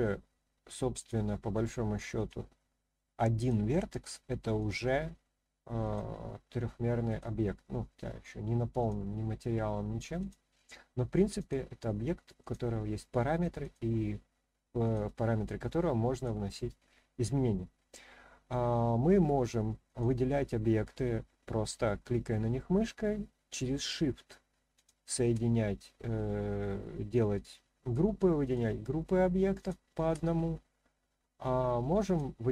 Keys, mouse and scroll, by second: 1.0 click, 2.1 click, 3.4 click, 4.6 click, 5.8 click, 7.1 click, 8.8 click, 10.2 click, 11.4 click, 12.4 click, 13.6 click, 14.8 click, 16.1 click, 17.1 click, 19.8 click, 24.7 shift+click, 28.4 shift+click, 29.6 shift+click, 32.0 click.